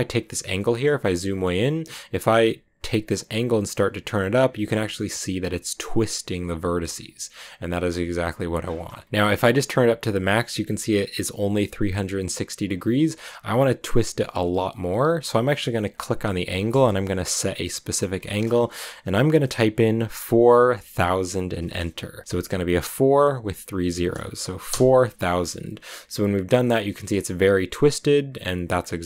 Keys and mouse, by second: 0.4 shift+middle click, 1.1 shift+middle click, 3.2 click, 6.2 click, 7.2 shift+middle click, 8.3-10.7 drag, 18.1-25.1 drag, 23.0 Left, 25.1 Right, 26.7 click, 28.9 click.